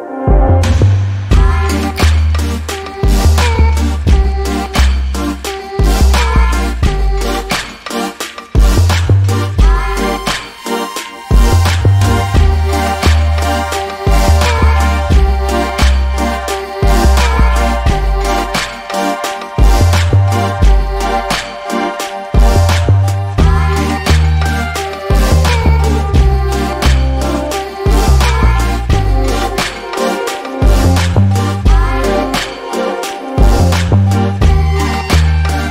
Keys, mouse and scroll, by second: 0.0 alt+click, 0.9-1.3 scroll down 1, 1.3 n, 1.7 scroll up 1, 2.4 alt+click, 3.0 alt+scroll down 1, 5.0 alt+click, 7.7 double click, 8.3 click, 8.6 double click, 9.1 click, 9.5 double click, 10.7 click, 11.0 double click, 11.7 alt+middle click, 12.1 alt+click, 13.3 n, 13.4 a, 13.9-14.2 scroll down 1, 14.2 alt+click, 15.6-16.0 scroll up 1, 16.1 alt+click, 18.2 alt+middle click, 18.7-19.4 scroll up 1, 19.4 click, 19.8 scroll up 1, 20.8 click, 23.4 alt+middle click, 23.8 alt+click, 29.5 alt+middle click, 30.0 alt+click, 35.5 alt+click.